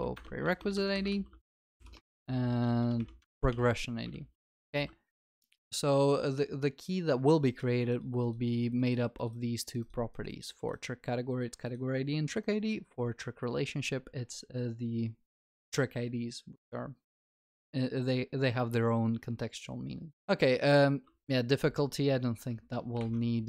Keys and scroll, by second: 1.1 ctrl+w, 3.5 Return, 4.1 ctrl+s, 4.1 ctrl+alt+shift+l, 4.7 ctrl+s, 23.0 alt+F12.